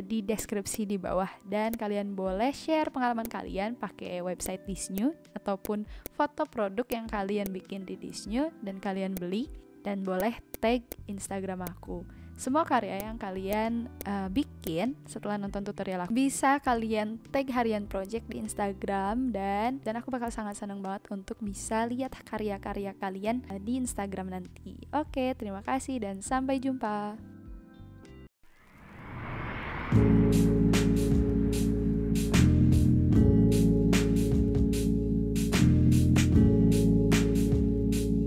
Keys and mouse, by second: 0.4 shift+click, 0.7 click, 1.7 alt+click, 3.2 shift+click, 4.1 |, 4.4 click, 4.8 v, 4.9 click, 5.6 click, 6.1 shift+click, 6.8 v, 6.9 click, 7.4 alt+click, 9.1 shift+click, 10.1 click, 10.4 v, 10.5 click, 11.6 click, 12.3 BackSpace, 12.5 2, 13.5 click, 14.0 click, 14.2 3, 14.3 Return, 14.6 click, 19.3 ctrl+y.